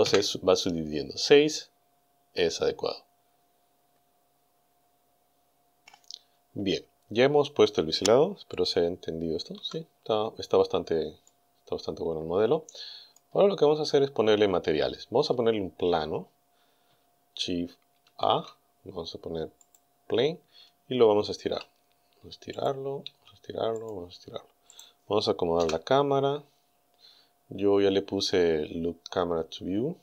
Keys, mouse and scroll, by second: 0.1 KP_Enter, 3.2-3.8 scroll down 2, 3.9-4.6 scroll down 2, 5.1 scroll down 2, 9.6 z, 11.3-13.4 drag, 13.6-14.1 scroll down 2, 14.3-14.9 scroll up 2, 14.9-15.3 scroll down 2, 15.3 scroll up 2, 15.6 scroll down 2, 18.1 shift+a, 19.6 click, 21.4 s, 22.6 click, 23.1 s, 23.8 click, 24.8 right click, 25.6 KP_0, 27.0-27.6 scroll up 2, 28.0 scroll up 2.